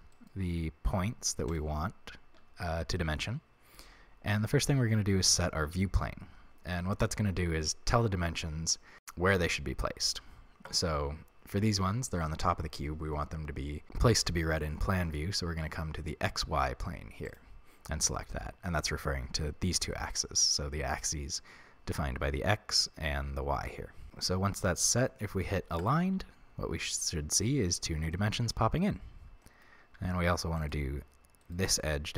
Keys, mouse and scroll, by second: 0.1 shift+right click, 1.5 shift+right click, 5.3-24.1 drag, 24.1-25.8 middle drag, 25.8 click, 27.1-30.6 middle drag, 30.0 a, 30.6 right click, 31.4 shift+right click.